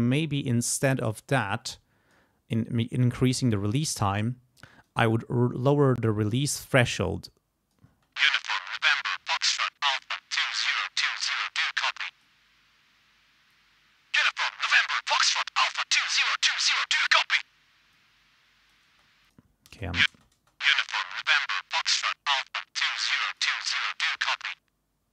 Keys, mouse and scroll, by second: 1.4 click, 3.1-5.1 drag, 5.6-7.9 drag, 7.9 space, 9.9 click, 11.2 click, 13.5 click, 18.9 space, 19.7 space, 21.1-23.6 drag.